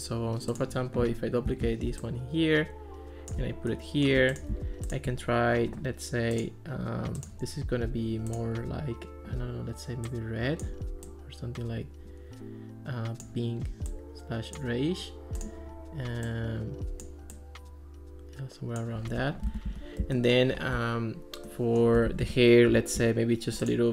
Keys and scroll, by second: 1.5 super+d, 19.5 Escape.